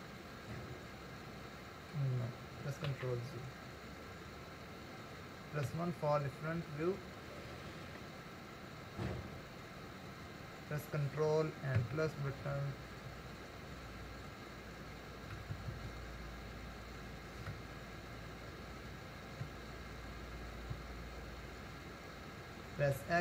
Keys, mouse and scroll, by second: 0.3-3.1 middle drag, 3.1 ctrl+z, 3.8-4.8 scroll down 2, 4.8-5.7 scroll up 2, 5.7 KP_1, 7.0-8.1 shift+middle drag, 8.1 scroll up 1, 8.8 scroll up 4, 11.8-12.2 ctrl+KP_Add, 13.0 ctrl+KP_Add, 13.9 ctrl+KP_Add, 16.3 ctrl+KP_Add, 18.9 KP_Add, 19.5 ctrl+KP_Subtract, 20.8 KP_Subtract, 23.0 x.